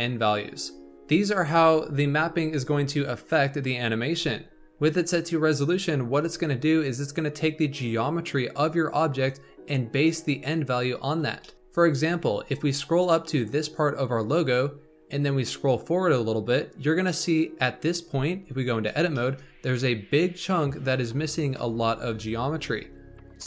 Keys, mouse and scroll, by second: 6.2-9.3 drag, 11.3 shift+middle drag, 11.5-14.7 scroll up 3, 15.4-18.4 drag, 18.4 Tab, 19.1-22.1 shift+middle drag.